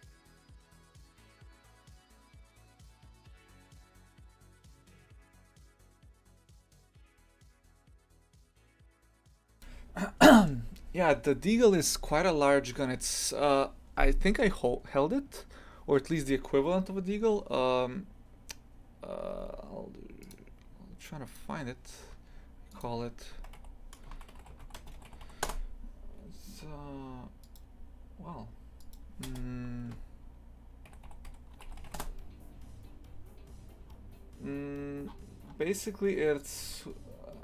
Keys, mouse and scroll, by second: 1.5 g, 12.2 scroll down 1.